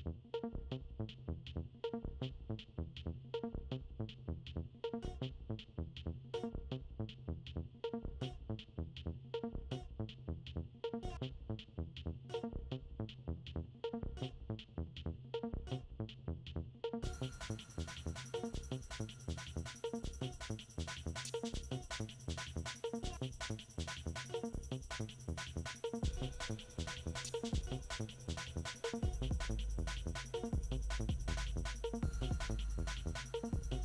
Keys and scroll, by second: 10.4 ctrl+d.